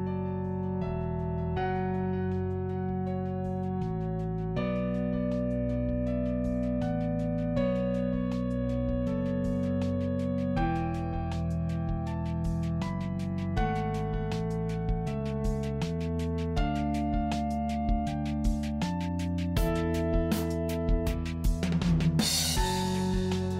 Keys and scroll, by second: 9.7 Return, 14.8 ctrl+j.